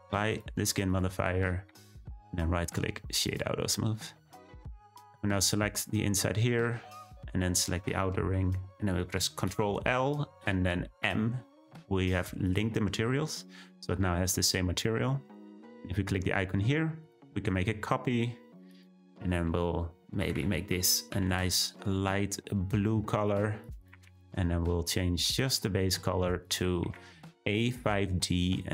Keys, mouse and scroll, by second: 0.9-2.2 drag, 2.2-3.2 right drag, 3.2 click, 5.0 click, 7.4 shift+click, 11.0 ctrl+l, 12.4 click, 13.0-17.1 scroll down 1, 17.1-28.7 drag.